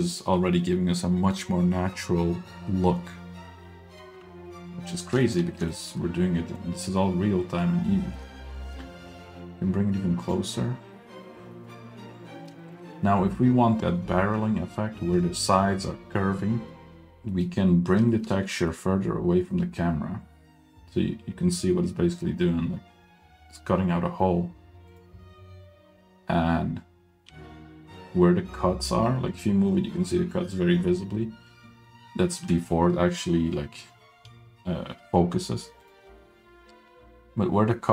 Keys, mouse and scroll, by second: 4.9 middle click, 5.2 shift+middle drag, 5.4 scroll up 1, 5.6 shift+middle click, 5.8 shift+middle click, 6.0 middle click, 7.5 scroll down 1, 7.6-8.2 shift+middle drag, 8.3 shift+middle click, 8.6 shift+middle click, 9.2 g, 11.6 middle click, 12.4 middle click, 12.6 shift+middle drag, 17.0 scroll down 2, 17.3 middle click, 17.7-18.0 scroll up 1, 18.1 shift+middle click, 18.5 g, 27.3 g.